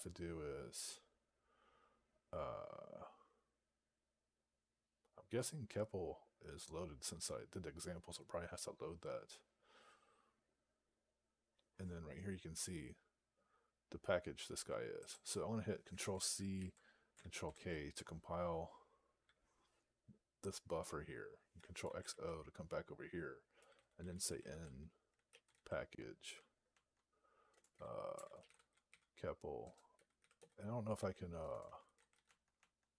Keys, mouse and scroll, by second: 14.9 click, 17.3 ctrl+k, 23.3-25.9 typing, 26.2 Tab, 27.4-32.5 typing.